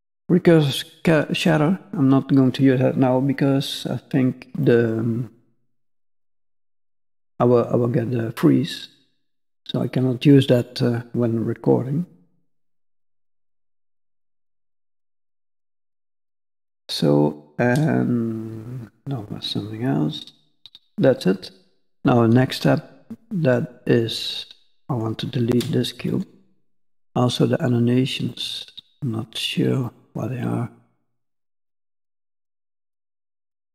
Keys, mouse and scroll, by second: 4.6 middle click, 6.1-7.6 scroll up 1, 13.1 click, 14.3 click, 15.4 middle click, 24.8 click, 25.9 x, 28.6 click, 29.8 click, 31.2 click, 31.9 click, 33.1 click.